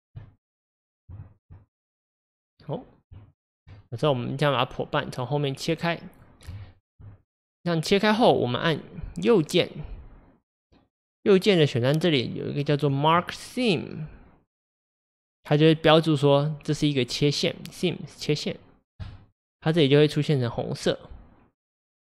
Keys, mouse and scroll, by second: 0.2-1.4 middle drag, 1.4 ctrl+Left, 1.8 middle click, 2.6 scroll down 2, 3.5 ctrl+Left, 3.8-19.1 middle drag, 19.7 click, 21.8-22.1 middle drag.